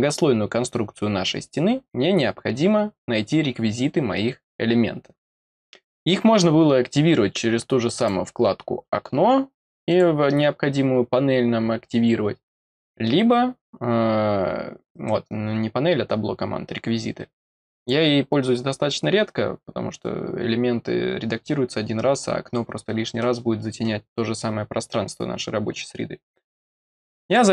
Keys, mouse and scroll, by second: 7.9 click, 9.8 click, 17.7 click, 27.2 click.